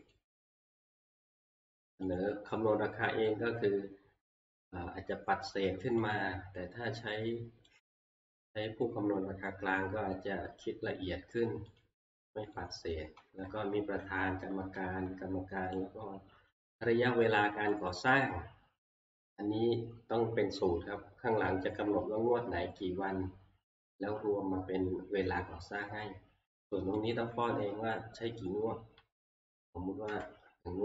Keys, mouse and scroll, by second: 0.1 click, 0.6 click, 1.1 Right, 2.2 click, 6.2 click, 7.8 click, 11.8 click, 12.6 click, 12.9 Right, 13.2 Right, 13.5 Right, 13.7 Right, 14.0 Right, 14.4 Right, 14.5 Right, 14.8 Right, 15.1 Right, 17.9 click, 27.1 click, 30.1 1.